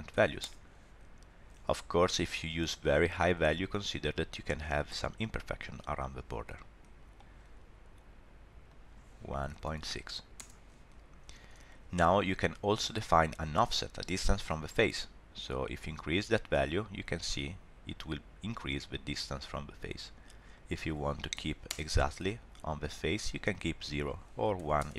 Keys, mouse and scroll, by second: 3.2 middle click, 6.5 middle click, 8.7 click, 12.5 scroll up 1, 12.8 shift+middle click, 13.0 middle click, 15.4 click, 20.5 click, 23.8 click.